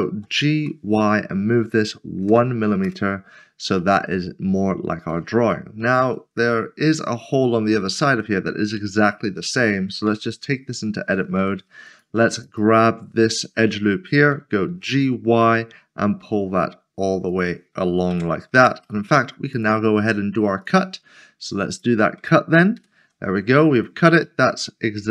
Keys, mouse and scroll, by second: 0.1-0.6 typing, 2.2 typing, 2.8 Return, 3.8 middle click, 5.5 shift+middle click, 10.1 Tab, 11.4 typing, 11.9 click, 12.4 alt+click, 13.1 scroll down 1, 14.7 typing, 17.3 click, 18.1 Tab, 18.8 Tab, 19.0 middle click, 24.2 middle click.